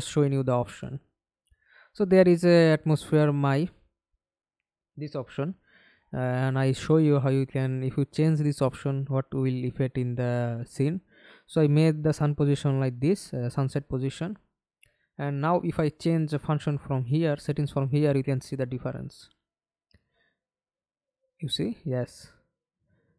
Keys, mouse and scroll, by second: 0.0-0.5 scroll down 1, 0.5-3.5 scroll down 1, 4.2 middle click, 5.5 alt+F9, 6.1 alt+click, 7.3-8.5 alt+scroll up 4, 9.0 scroll up 1, 9.2-11.0 ctrl+l, 11.3 ctrl+l, 14.1 scroll down 1.